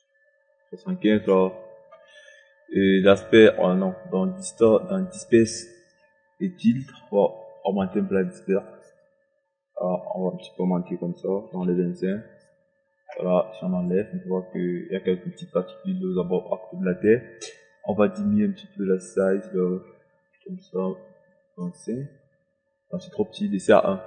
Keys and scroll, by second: 0.2 KP_7, 0.5 KP_5, 11.1 KP_2, 11.4 KP_4, 11.5 KP_5, 19.8 KP_Decimal, 20.1 KP_5, 23.6 4.